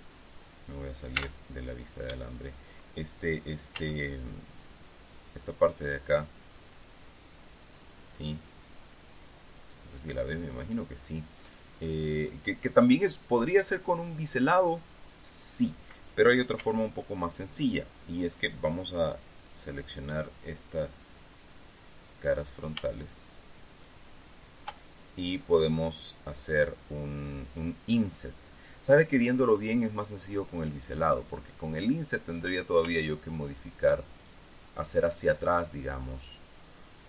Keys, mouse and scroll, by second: 1.7 z, 4.3 z, 17.1 z, 20.0 click, 22.0 click, 23.2 shift+right click, 28.1-30.3 middle drag, 31.1 click, 32.9 right click, 34.8 shift+right click, 35.5 shift+right click, 36.7 shift+right click.